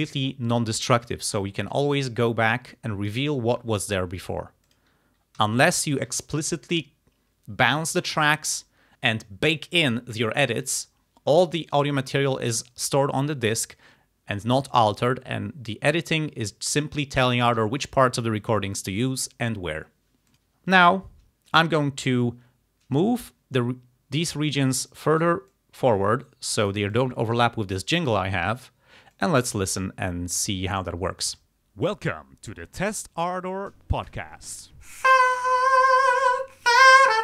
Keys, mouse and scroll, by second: 1.1 click, 1.7-3.3 drag, 4.7 click, 5.4 s, 5.7 click, 20.3 click, 24.6 click, 25.6-26.9 drag, 29.2 click, 31.3 space.